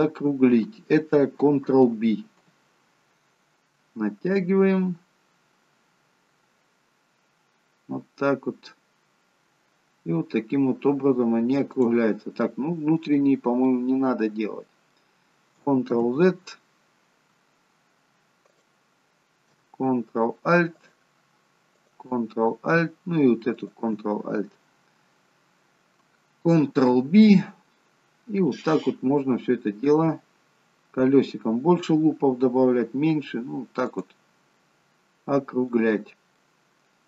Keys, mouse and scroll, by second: 2.4 ctrl+b, 12.5 middle click, 13.4-15.4 scroll up 3, 13.9 middle click, 16.1 ctrl+z, 17.3-18.7 scroll down 2, 18.7 click, 18.7-19.2 scroll down 1, 20.9 alt+shift+click, 26.8 ctrl+b, 34.6 scroll up 1, 34.7 middle click, 36.0-36.5 scroll down 4, 36.5 middle click.